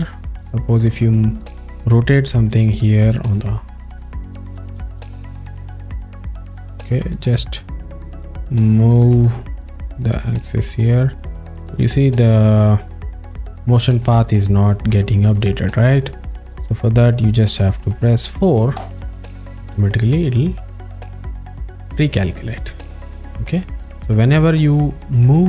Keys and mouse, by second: 0.2 click, 3.0 click, 4.0 click, 5.8 z, 6.1 click, 9.0 w, 9.5 y, 13.9 click, 14.9 alt+middle click, 15.5 ctrl+alt+middle click, 16.5 alt+middle click, 18.9 4, 21.8 click.